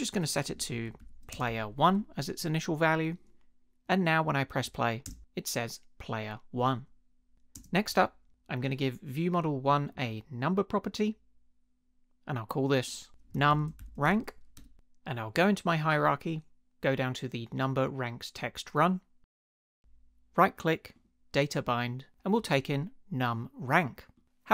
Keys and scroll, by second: 0.0-1.9 typing, 5.0 space, 7.5 space, 13.0-14.6 typing.